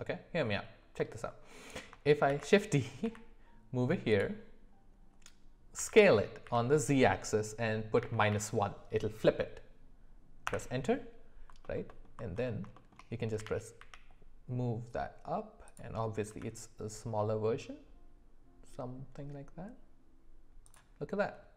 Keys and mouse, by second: 2.3 shift+d, 5.8 s, 11.6 alt+middle click, 11.9 alt+middle click, 12.8 shift+middle click, 13.4 g, 16.3 s.